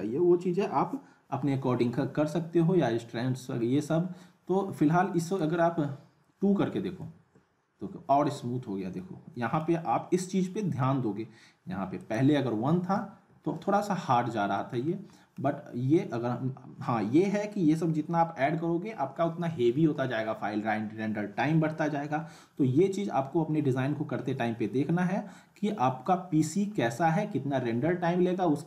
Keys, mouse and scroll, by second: 5.2 click, 8.5-9.0 scroll up 1, 9.3 middle click, 12.0 click, 14.1-14.5 scroll down 1, 14.5 middle click, 14.9 scroll down 1, 15.2 middle click, 23.9 scroll down 1, 26.0-26.7 middle drag.